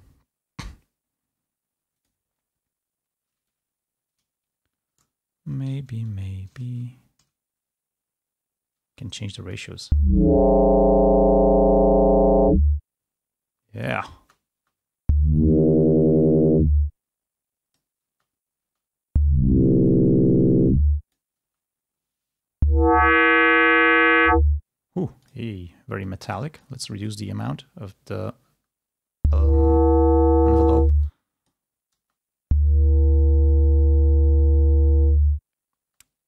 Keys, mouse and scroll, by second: 9.6 space, 12.7-14.6 drag, 14.6 space, 17.0-18.1 drag, 17.0 space, 18.1 space, 20.9 click, 20.9 space, 24.3 space, 25.3 click, 26.4-27.5 drag, 27.5 space, 28.8 space, 30.7 space, 31.7 click, 32.1 space, 35.9 space.